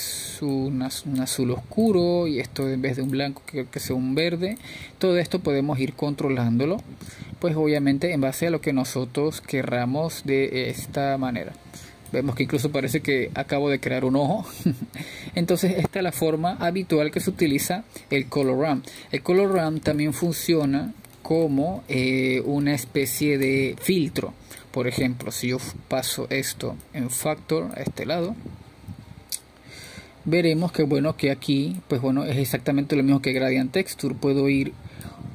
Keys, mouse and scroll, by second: 1.4 drag, 2.9 click, 5.2 click, 6.0 click, 8.2-10.4 middle drag, 10.4-16.3 drag, 16.3-19.2 middle drag, 19.2-21.3 scroll down 1, 21.3-26.7 drag, 26.7 BackSpace, 28.3-31.1 drag, 33.7-35.3 drag.